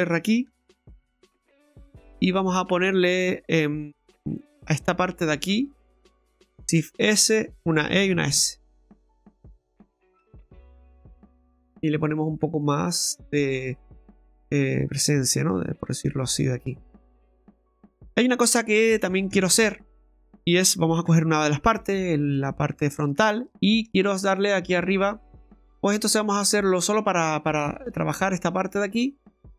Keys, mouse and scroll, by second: 0.6 ctrl+r, 1.4 middle click, 2.7 right click, 4.4 click, 4.9 alt+shift+right click, 5.7 alt+shift+right click, 6.5 shift+s, 7.9 e, 11.4 middle click, 12.1-12.4 scroll down 2, 12.4 middle click, 13.1 right click, 13.4 scroll down 1, 13.6 middle click, 17.8-18.7 scroll up 6, 18.8 middle click, 19.2 shift+middle click, 20.0 middle click, 21.1 KP_1, 22.3 shift+middle click, 23.1 scroll up 2, 23.5 shift+middle click, 25.6 ctrl+z, 26.1 right click, 27.8 click.